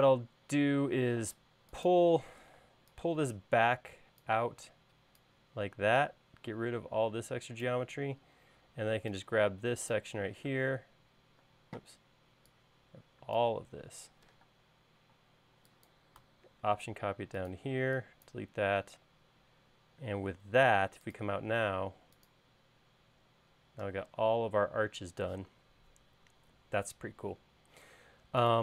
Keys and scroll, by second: 0.9 l, 3.1 p, 6.1 e, 8.7 space, 11.0 m, 12.1 space, 15.0 m, 18.3 e, 19.7 space.